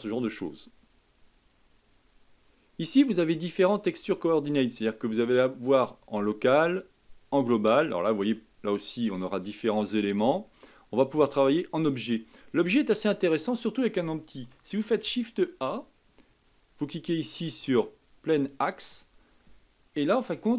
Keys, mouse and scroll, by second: 1.3-4.5 drag, 6.2-8.3 drag, 8.3-10.5 middle drag, 10.5-12.4 drag, 12.4 scroll down 2, 12.9-14.8 middle drag, 14.8 shift+a.